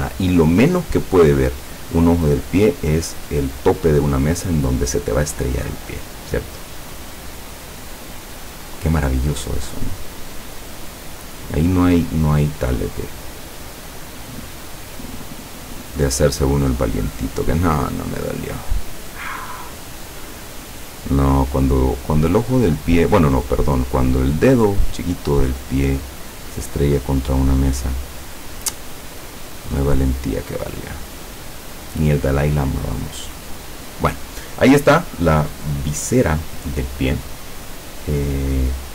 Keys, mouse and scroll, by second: 0.5-1.9 drag, 7.0 click, 8.5 click, 9.6 click, 15.2 click, 16.1 click, 16.5-17.0 drag, 17.5 click, 18.6 click, 19.3 click, 21.7 click, 24.1 click, 25.3 click, 26.6 click, 29.1 click, 32.8-34.2 drag.